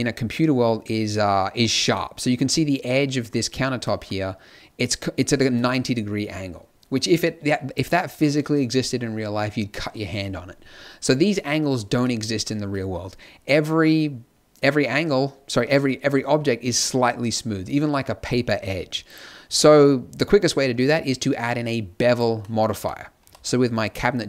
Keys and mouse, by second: 1.5 middle click, 22.3 click, 22.6 z, 23.1 z.